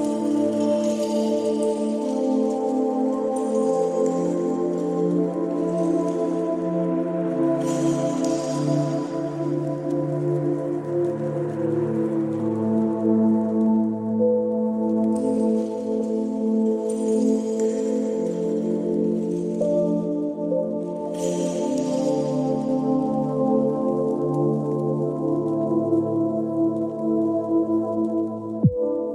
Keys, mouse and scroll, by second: 1.3 g, 2.9 click, 3.6 click, 4.3 click, 5.3 click, 7.2 g, 8.9 click, 9.9 click, 17.7 click, 19.8 click, 22.2 click, 23.7 click, 27.1 click, 28.1 click.